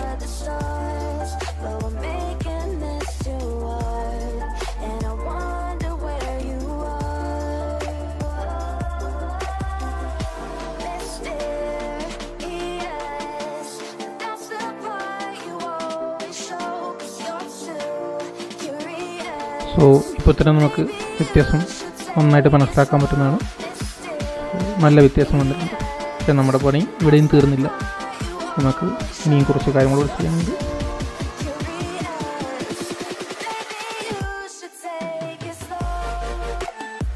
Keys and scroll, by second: 17.2 super+0, 23.9 super+0, 25.3 super+1, 26.7 super+-, 30.9 super+-.